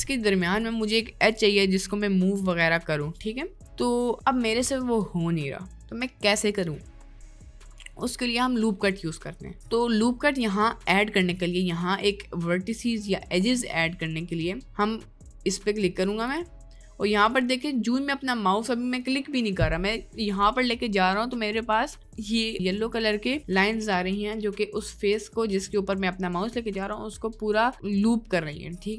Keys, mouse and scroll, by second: 7.1 middle click, 9.5 middle click, 11.4 middle click, 12.3 middle click, 14.0 middle click, 14.7 middle click, 17.7 middle click.